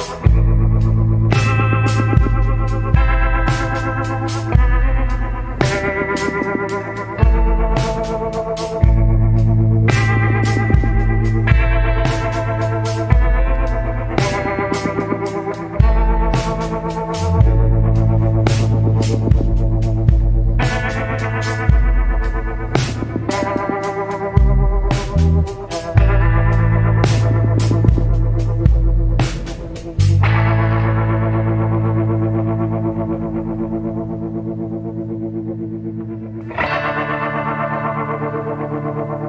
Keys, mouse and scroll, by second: 0.1 scroll down 1, 10.4 scroll down 1, 11.5 scroll up 1, 22.1 scroll down 1, 30.7 scroll down 1, 31.5 scroll up 1, 33.8 scroll down 1, 34.8 scroll up 1, 35.7 scroll down 1, 38.4 scroll up 1.